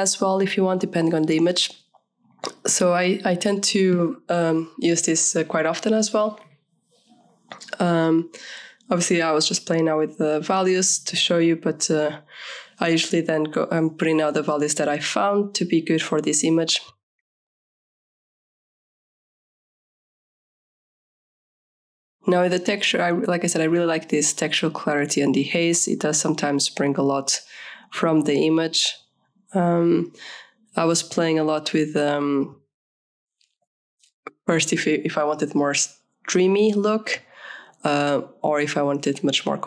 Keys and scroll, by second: 10.6 KP_Subtract, 10.9 KP_1, 11.2 Tab, 17.2 KP_2, 17.6 Tab, 18.3 KP_Decimal, 18.4 Tab, 19.1 KP_8, 19.3 Tab, 19.7 KP_Subtract, 19.9 Tab, 20.7 KP_7, 20.8 Tab, 21.3 KP_1, 21.4 Tab, 21.8 KP_7, 21.9 Tab, 24.9 KP_Subtract, 25.2 KP_1, 25.5 KP_7, 25.7 Tab, 31.2 KP_1, 31.5 KP_4, 31.6 Tab, 37.1 KP_Subtract, 38.5 KP_2, 38.8 KP_0, 38.9 Tab.